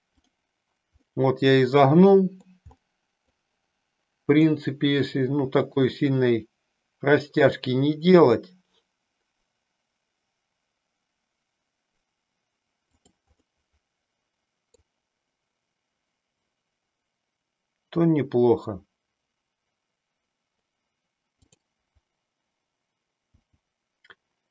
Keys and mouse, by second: 1.0-2.5 middle drag, 2.8 middle click, 4.4 click, 5.1 r, 13.0 click, 13.5-14.9 middle drag, 23.4 g.